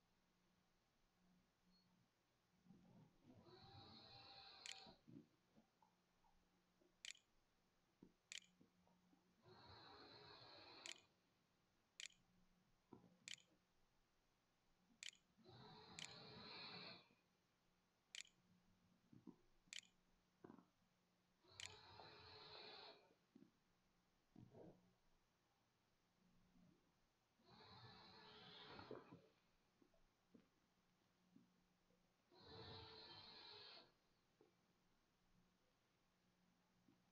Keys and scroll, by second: 3.6-8.6 typing, 9.9-17.1 typing, 17.7 Tab, 18.1-21.9 typing.